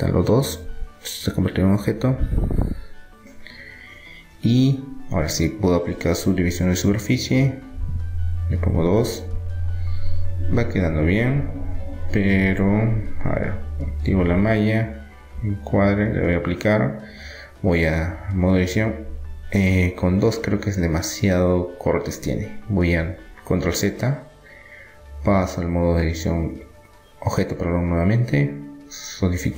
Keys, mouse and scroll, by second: 1.1 Tab, 1.4-4.3 middle drag, 4.8 middle click, 5.6-7.3 drag, 8.8-10.3 drag, 9.6 Tab, 10.3-12.9 middle drag, 13.3-14.9 drag, 14.1 Tab, 14.9-16.0 middle drag, 16.0-17.6 drag, 17.3 Tab, 17.9-19.9 middle drag, 19.9 click, 20.9-24.3 middle drag, 21.3 ctrl+z, 23.5 Tab, 25.7-28.9 drag.